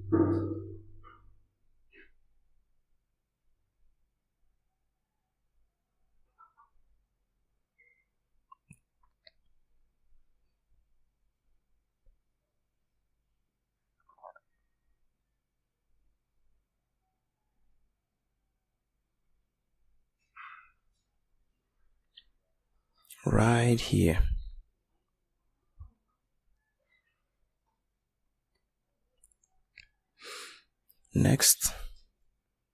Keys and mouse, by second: 2.1 middle click.